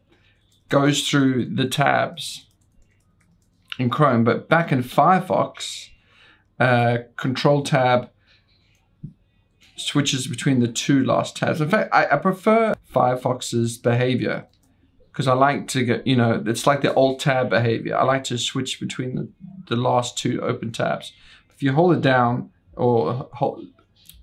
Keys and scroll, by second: 0.2 ctrl+Tab, 0.7 ctrl+Tab, 0.9 ctrl+Tab, 1.2 ctrl+Tab, 1.4 ctrl+Tab, 1.7 ctrl+Tab, 1.9 ctrl+Tab, 2.0 ctrl+Tab, 2.1 ctrl+Tab, 2.4 ctrl+Tab, 2.6 ctrl+Tab, 3.0 ctrl+Tab, 3.2 ctrl+Tab, 3.3 ctrl+Tab, 3.5 ctrl+Tab, 3.6 ctrl+Tab, 4.1 ctrl+Tab, 4.3 ctrl+Tab, 4.5 ctrl+Tab, 5.8 super+1, 8.6 ctrl+Tab, 9.7 ctrl+Tab, 10.6 ctrl+Tab, 11.2 ctrl+Tab, 11.3 ctrl+Tab, 12.1 ctrl+Tab, 12.7 ctrl+Tab, 12.8 ctrl+Tab, 13.0 ctrl+Tab, 13.6 ctrl+Tab, 14.7 ctrl+Tab.